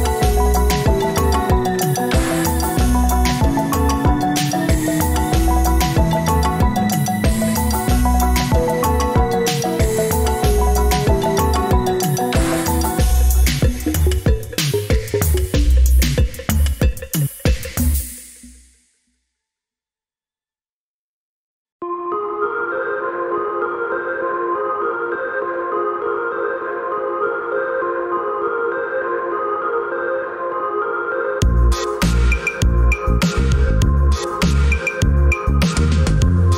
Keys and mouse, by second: 0.9 middle click, 5.9 alt+a, 6.7 click, 7.6 g, 10.4 click, 11.7-17.1 drag, 20.2 ctrl+z, 20.6 ctrl+z, 22.1 ctrl+z, 24.0 ctrl+shift+z, 27.5 click, 30.0 g, 36.0-36.5 middle drag.